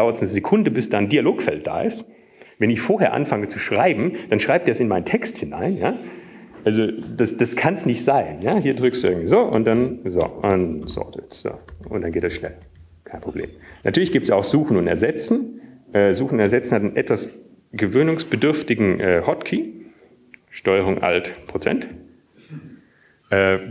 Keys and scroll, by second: 0.2 Up, 11.1 Down, 11.1 Up, 12.4 Up, 13.2 Up, 13.2 ctrl+s, 13.2-14.7 typing, 14.8 ctrl+s, 14.8 ctrl+s, 16.3 ctrl+r, 16.3 Up, 17.5 Down, 17.9-23.7 Up.